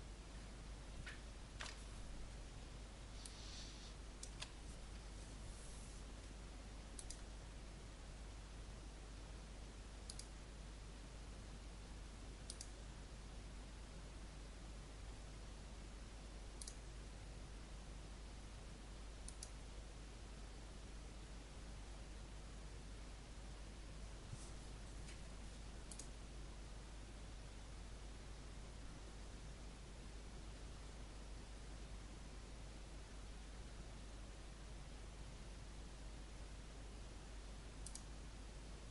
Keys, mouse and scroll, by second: 1.5 KP_Decimal, 3.1 alt+click, 6.9 click.